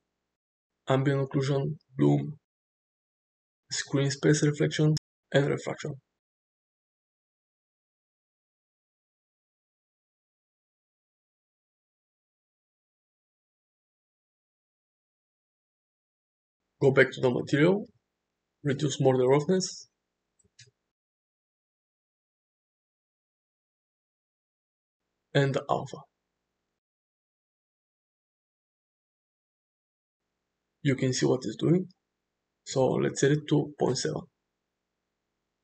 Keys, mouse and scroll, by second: 1.1 click, 2.1 click, 4.3 click, 5.1 click, 6.1 click, 7.6-9.3 middle drag, 9.6-10.7 middle drag, 10.9 shift+middle drag, 11.3-13.9 middle drag, 14.6 drag, 15.1 click, 17.7 click, 19.7-22.7 drag, 23.0-25.4 middle drag, 27.9-32.8 drag, 33.3-35.6 drag.